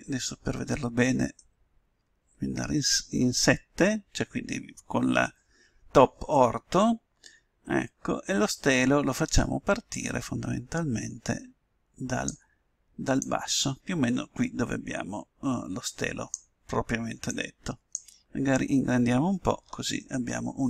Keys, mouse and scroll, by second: 2.0 KP_7, 7.5-9.9 middle drag, 9.9-11.7 drag, 13.2-14.8 drag, 17.2-19.1 drag, 19.1-20.6 middle drag.